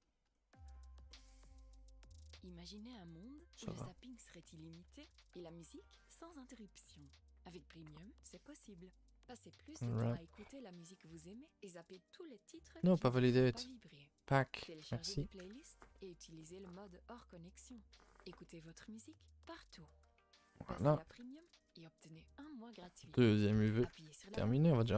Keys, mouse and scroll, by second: 4.2-5.0 scroll down 4, 5.0 alt+h, 5.2 scroll down 2, 5.4 a, 5.6 a, 5.8 middle click, 6.4 scroll down 1, 6.6 a, 6.9 shift+middle click, 7.2 scroll up 2, 7.6 a, 9.5 u, 10.2 a, 11.2 n, 12.1-13.2 drag, 13.2 ctrl+z, 13.7-14.9 drag, 14.9 n, 20.1 middle click, 20.4 Tab, 21.1 alt+h, 21.7 click, 22.4 click, 23.0 scroll down 2, 23.2 shift+middle click, 23.5 a, 23.6 a, 24.3 click.